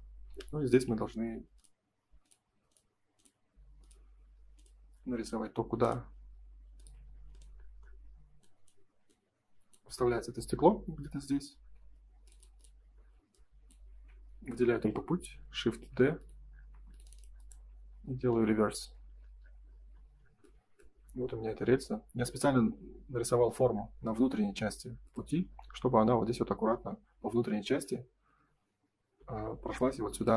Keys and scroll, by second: 11.2 space, 15.6 shift+d, 16.6 space, 18.7 Escape.